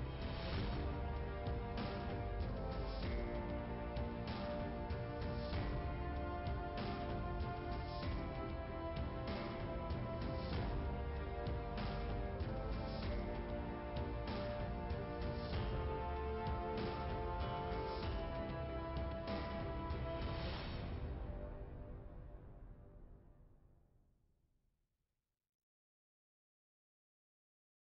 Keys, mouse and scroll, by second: 0.7 click, 0.9 click, 3.4 click, 4.9 click, 5.0 click, 5.8 click, 7.8 click, 10.6 click, 10.8 click, 11.6 click, 12.6 click, 15.4 click, 15.7 click, 17.8 click, 18.6 click, 18.7 click, 19.4 click, 22.4 click, 22.6 click.